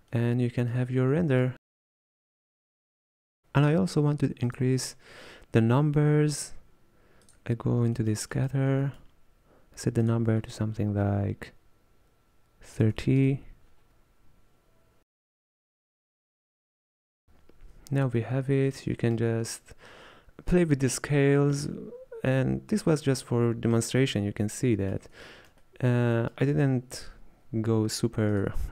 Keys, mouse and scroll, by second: 0.1-0.6 scroll down 1, 0.6 middle click, 1.3-1.6 scroll down 2, 1.6-4.5 middle drag, 4.5-7.6 drag, 15.7-17.2 middle drag, 17.2 alt+a, 18.4-19.6 middle drag, 19.6-21.0 scroll up 2, 21.0-21.4 scroll down 2, 21.8-28.7 middle drag.